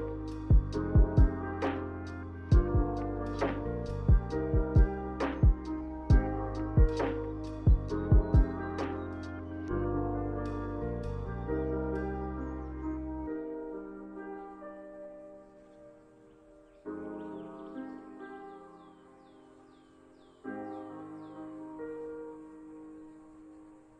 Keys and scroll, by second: 0.3 Delete, 0.7 Delete, 1.5 m, 5.0 m, 5.7 a.